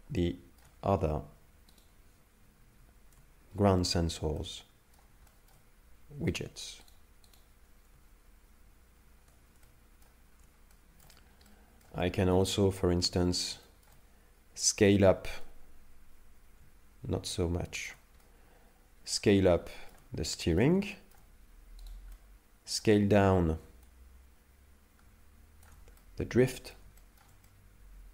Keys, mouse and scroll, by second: 0.2 shift+middle click, 0.9-1.5 scroll up 1, 1.5 scroll up 1, 1.8 right click, 3.5 ctrl+v, 4.4 middle click, 5.3 shift+middle click, 6.4 right click, 6.9 right click, 7.3 right click, 9.0 ctrl+v, 9.6 middle click, 10.2 scroll down 2, 10.7 shift+middle click, 11.5 middle click, 12.0 shift+middle click, 13.1 right click, 13.6 shift+middle click, 15.5 click, 18.2 middle click, 19.7 shift+middle click, 20.3 middle click, 20.8 shift+middle click, 21.8 right click, 22.0 right click, 22.2 middle click, 23.9 shift+click, 26.0 middle click, 27.0 shift+middle click, 27.5 middle click.